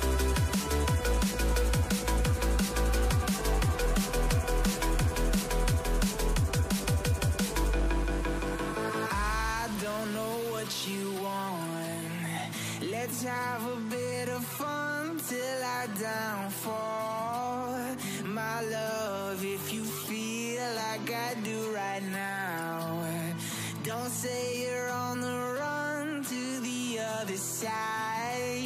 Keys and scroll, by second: 20.8-26.3 typing.